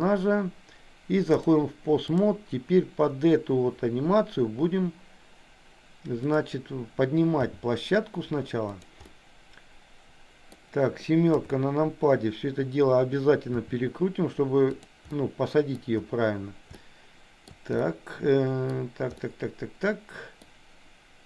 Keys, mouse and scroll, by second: 1.4 click, 6.2 click, 7.5 g, 9.1-10.5 middle drag, 11.3 KP_7, 13.6 r, 15.3 middle click, 16.7 shift+middle click, 17.9 middle click, 19.1-20.5 middle drag.